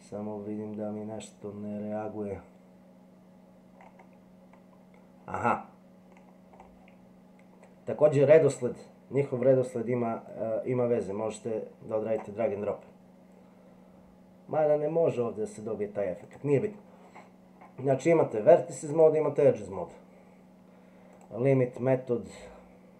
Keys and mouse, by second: 10.3-12.2 drag, 16.2 click, 18.9 click, 21.1 click.